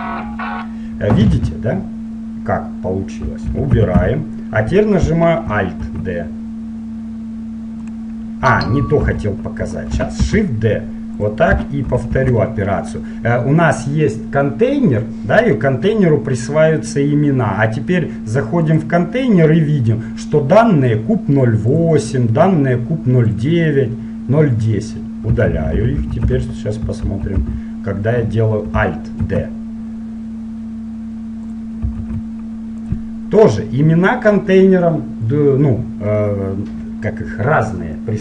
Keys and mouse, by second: 3.7 ctrl+z, 6.0 alt+d, 9.3 ctrl+z, 10.4 shift+d, 12.1 shift+r, 12.3 shift+r, 18.7-20.7 drag, 21.8-25.5 drag, 25.7-28.2 ctrl+z, 29.4 alt+d, 32.1 alt+d.